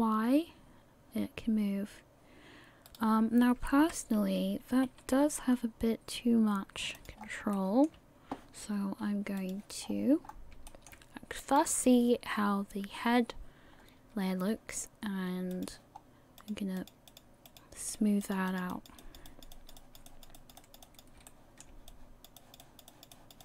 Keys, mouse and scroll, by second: 3.8 KP_1, 5.0 r, 7.2 scroll up 3, 7.5 shift+middle click, 9.4 click, 9.8-10.3 scroll down 4, 10.2 scroll up 2, 10.7 shift+middle click, 11.7 right click, 12.3 scroll down 1, 13.8-14.5 scroll up 2, 15.5 click, 16.0 scroll up 1, 16.4 click, 16.8 click, 17.9 click, 18.5 click, 18.7 click, 19.3 click, 19.5 click, 20.3 click, 20.6 click, 21.3 shift+middle click, 21.9 click, 22.4 click, 22.9 click, 23.1 click.